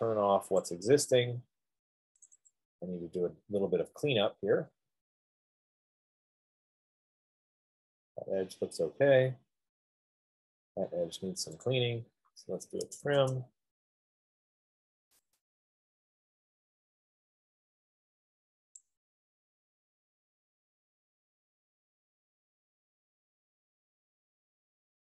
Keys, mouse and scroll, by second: 1.1 click, 3.0 click, 3.2 click, 4.0-5.9 scroll, 6.4-7.7 scroll, 8.0-8.8 scroll, 8.8-9.4 scroll, 9.8-10.8 scroll, 10.9 scroll, 12.0 click, 12.9-13.3 typing, 14.4 scroll, 19.0 click, 19.1 scroll, 20.6-21.1 scroll, 21.2 scroll, 21.5 scroll down 5, 22.9 scroll up 5, 23.1-24.2 scroll, 24.8-25.1 scroll down 2.